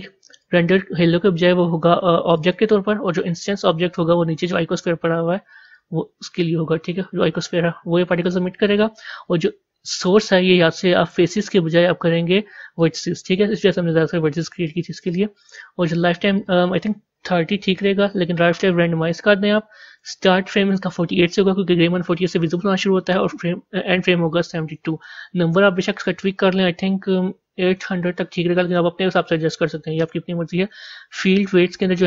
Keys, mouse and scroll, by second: 3.8 scroll down 1, 5.9 click, 7.5 scroll up 4, 8.1-9.1 scroll up 1, 12.8-28.5 drag, 28.5 KP_0.